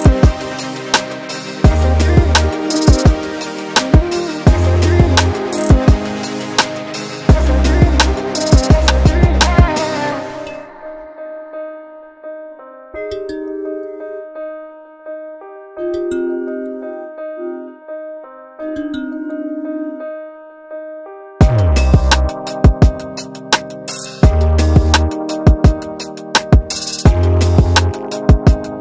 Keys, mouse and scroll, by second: 0.1 click, 0.1-0.6 scroll down 3, 0.6 click, 1.0 middle click, 1.6-2.0 scroll up 4, 2.1 middle click, 2.7 scroll up 2, 2.9 scroll down 3, 3.1-3.7 scroll up 3, 3.7 click, 4.7 click, 5.1 click, 5.7 scroll up 5, 5.9 scroll down 1, 6.0 scroll down 3, 6.1-6.6 scroll up 1, 6.6 click, 6.6-7.7 scroll up 3, 7.3 click, 7.7 click, 8.2-8.8 scroll up 2, 8.8 click, 9.4 click, 10.1 click, 10.6 click, 11.8 click, 12.2 Delete, 13.2 click, 13.8 ctrl+shift+t, 18.2-18.5 scroll down 1, 18.5 scroll up 1, 18.7 scroll down 1, 18.9-19.2 scroll down 2, 19.2 alt+click, 19.7 alt+click, 20.0 middle click, 20.9 shift+middle click, 21.3 middle click, 21.9 shift+middle click, 24.1 click, 24.8 click, 25.1 click, 25.6 click, 26.9 click, 27.6 click.